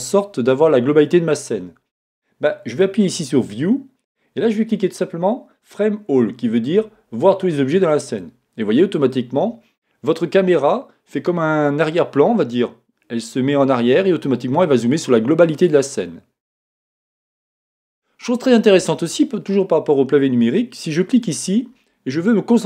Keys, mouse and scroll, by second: 8.5-17.9 drag, 17.9-21.1 shift+middle drag, 21.1 click.